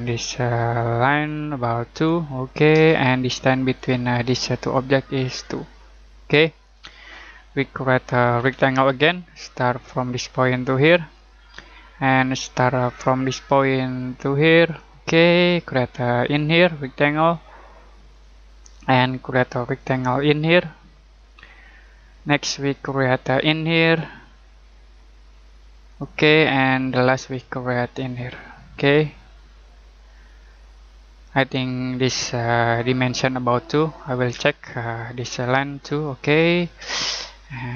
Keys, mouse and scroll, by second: 1.2 click, 2.7 Return, 3.7 click, 8.3 r, 9.8 click, 25.9 click, 31.5-32.6 scroll down 1, 32.6-34.3 scroll up 1, 34.3 d, 35.1 click, 36.8 Return.